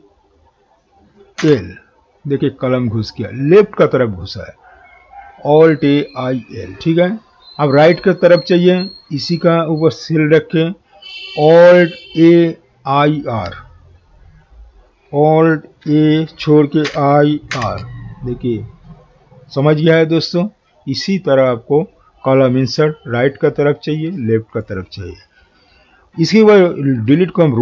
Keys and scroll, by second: 15.8 alt+a.